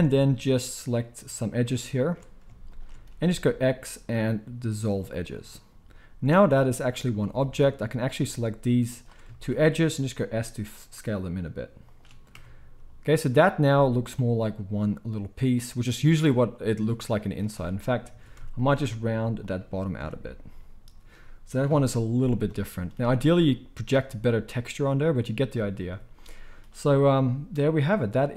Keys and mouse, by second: 0.1 alt+shift+click, 0.9 alt+shift+click, 2.7 alt+shift+click, 3.1 x, 4.9-8.1 middle drag, 8.1 alt+shift+click, 8.3 alt+shift+middle click, 8.9 alt+shift+click, 9.1-18.3 shift+middle drag, 10.1 s, 12.3 Tab, 13.6 z, 17.5 Tab, 18.2 alt+a, 18.8 s, 20.0 Tab, 21.7 KP_1, 25.1-27.8 middle drag, 27.8-28.3 drag.